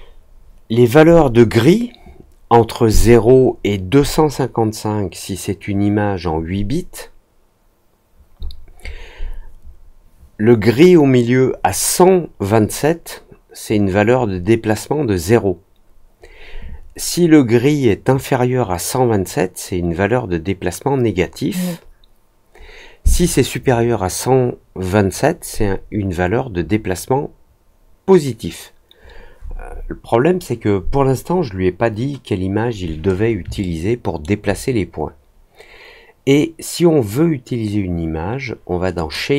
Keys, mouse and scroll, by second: 33.5 alt+middle click, 38.9 click.